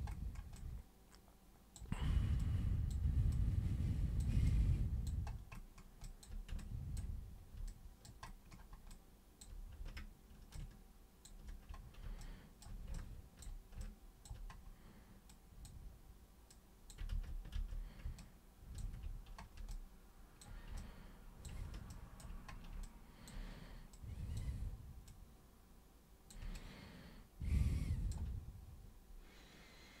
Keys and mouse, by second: 0.5-1.7 alt+super+drag, 2.3 alt+super+click, 3.3 super+click, 4.4 alt+super+click, 6.0 alt+super+click, 6.5-6.9 ctrl+drag, 7.7 alt+click, 8.9-9.4 alt+drag, 10.5-11.2 ctrl+shift+drag, 12.2 alt+super+click, 12.9-13.4 ctrl+super+drag, 13.8-14.2 alt+super+drag, 15.2 super+click, 16.5 super+click, 17.1 ctrl+super+z, 17.5 ctrl+super+z, 18.2-18.7 ctrl+shift+super+drag, 19.7-20.4 alt+super+drag, 20.8-21.4 ctrl+super+drag, 21.8 ctrl+super+drag, 22.8-23.2 alt+super+drag, 23.9 super+click, 25.0 super+click, 26.5-28.1 alt+super+drag.